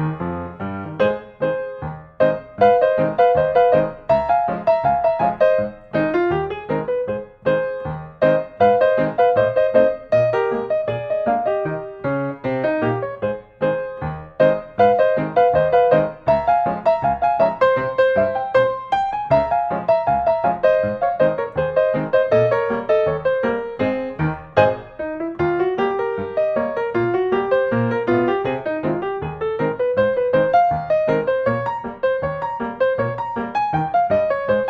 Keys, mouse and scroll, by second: 0.5-1.6 drag, 1.7-2.2 typing, 2.5 Return, 5.6 click, 9.0 click, 10.0 click, 10.6 click, 12.3-14.4 typing, 14.7 Return, 17.0 scroll, 17.2 middle click, 18.8-19.9 drag, 21.0-22.1 drag, 23.0-24.1 drag, 24.4 click, 26.6 click, 27.9 click, 29.8-30.6 scroll, 30.6 click, 32.9 click, 33.8-34.6 scroll.